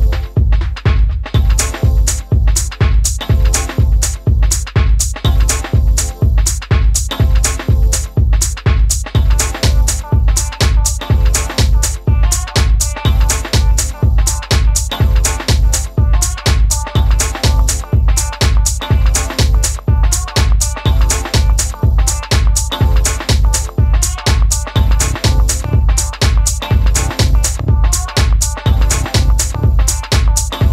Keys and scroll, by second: 8.3 d, 9.0 d, 19.8 typing, 27.9-29.0 typing.